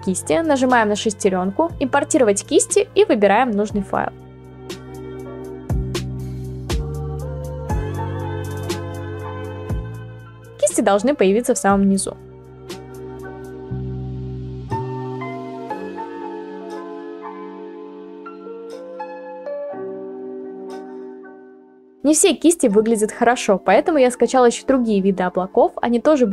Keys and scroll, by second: 14.1 ctrl+z, 14.3 ctrl+z, 16.3 ctrl+z, 16.7-17.5 ], 18.2 ctrl+z, 18.3 ctrl+z, 24.9 ctrl+z, 26.0 ctrl+z.